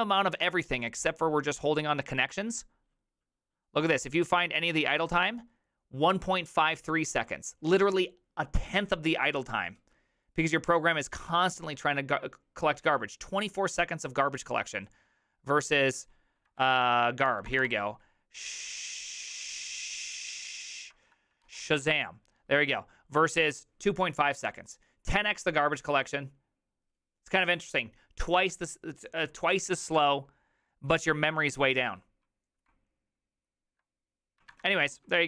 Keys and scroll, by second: 16.6 ctrl+f, 17.3 Return, 17.5 Return, 17.6 Return, 21.5 ctrl+f, 34.6 alt++.